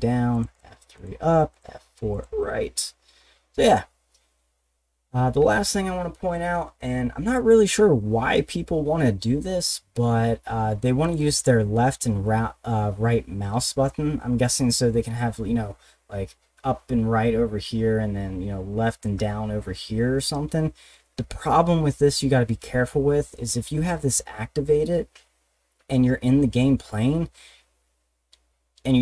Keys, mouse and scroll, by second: 0.3 click, 0.5 click, 1.0 click, 1.5 click, 2.1 click, 4.3-10.8 middle drag, 11.0 click, 11.2 click.